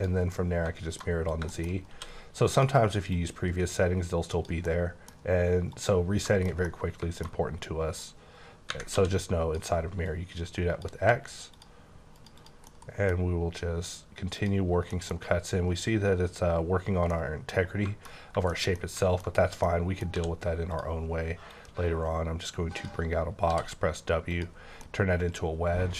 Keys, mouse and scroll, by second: 0.3 middle click, 1.1-1.9 scroll up 5, 1.5 shift+middle click, 1.9 d, 2.5 click, 3.1 click, 4.6 middle click, 5.7 click, 6.0 scroll down 3, 6.3 middle click, 6.6 middle click, 7.3 scroll up 2, 7.9 click, 8.9 d, 10.0 click, 11.5 click, 12.1 click, 12.4 double click, 12.7 middle click, 14.4 click, 14.6 scroll down 2, 14.9 middle click, 17.1 middle click, 17.7-18.1 scroll down 2, 18.2 scroll up 1, 18.5 shift+middle click, 19.2 scroll up 2, 19.6 middle click, 20.1 d, 20.7 click, 21.5 click, 23.5 w, 24.6 scroll down 2, 24.8 middle click.